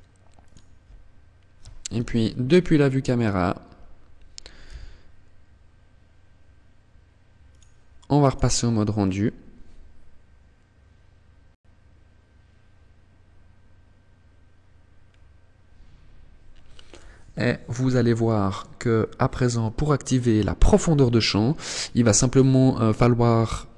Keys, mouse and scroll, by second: 1.0 KP_0, 3.9 g, 6.7 click, 7.3 click, 13.8 scroll up 1.